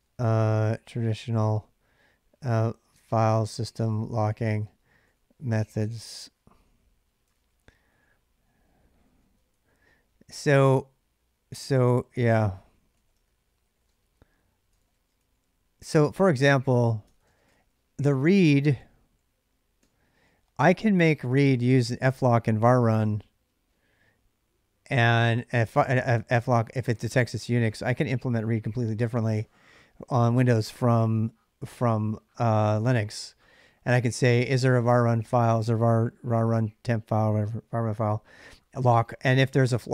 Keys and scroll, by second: 0.0-19.6 typing, 10.1 ctrl+[.